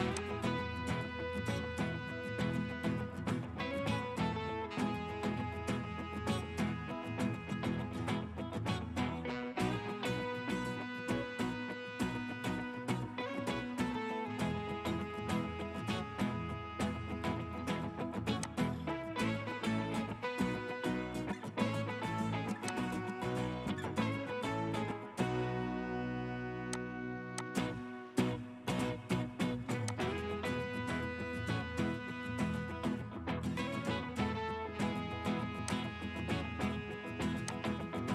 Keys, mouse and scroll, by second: 0.5 BackSpace, 1.9-3.8 typing, 4.9-7.0 typing, 9.1 typing, 10.6-11.6 typing, 12.7 typing, 14.9-15.9 typing, 21.4 typing, 35.0 typing.